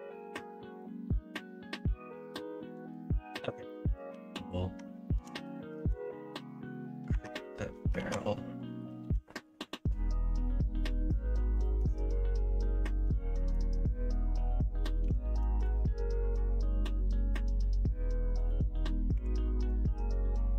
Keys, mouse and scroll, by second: 4.1 Tab, 5.1 KP_1, 5.4 KP_3, 5.7 alt+z, 7.1 Tab, 7.9 alt+z, 9.0 KP_3, 10.8 3, 13.3 shift+y, 15.0 s, 19.5 x.